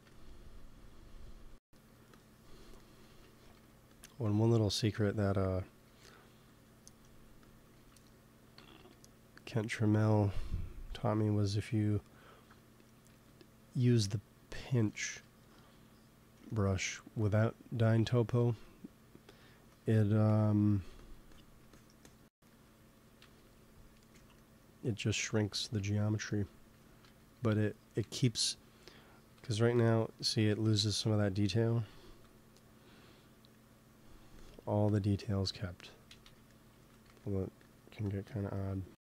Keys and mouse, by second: 0.8 click, 1.6 f, 3.0 ctrl+z, 3.4 f, 4.8 KP_1, 5.7 f, 7.7 ctrl+z, 8.5 g, 8.7 f, 12.3 click, 13.0 KP_3, 14.9-16.7 middle drag, 16.7 f, 17.5-19.3 drag, 20.2 i, 20.6 f, 21.3-24.0 drag, 23.1 KP_3, 27.1 f, 27.9 g, 28.1 f, 28.6 click, 29.1 right click, 29.2 p, 29.5-31.4 drag, 30.5 ctrl+z, 30.9 ctrl+z, 32.0 p, 33.6-36.6 drag, 36.0 ctrl+z, 36.6 ctrl+z, 37.0 f, 37.6-39.0 drag.